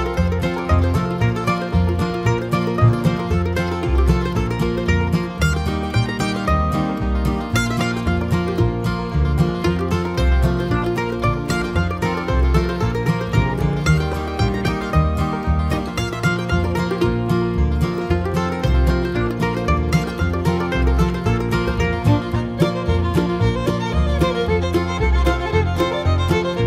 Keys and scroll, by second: 5.0 ctrl+t, 9.9 Return, 20.5 ctrl+g, 21.4 ctrl+t.